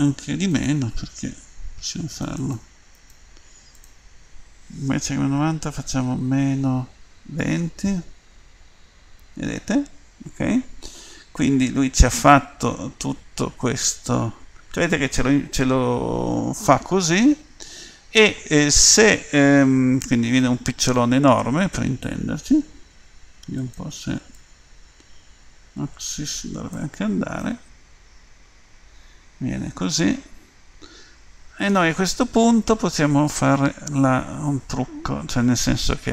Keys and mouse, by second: 2.1-16.7 drag, 24.3-26.2 drag, 27.4-29.5 middle drag.